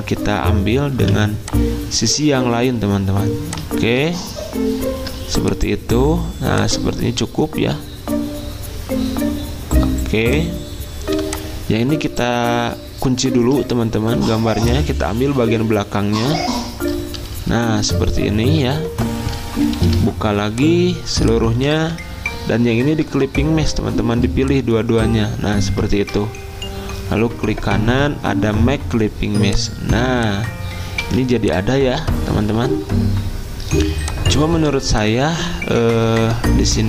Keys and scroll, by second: 0.9 v, 14.2 ctrl+2, 15.2 ctrl+z, 19.8 ctrl+alt+2, 21.8 ctrl+z, 25.9 ctrl+z, 31.0 z, 33.9 v.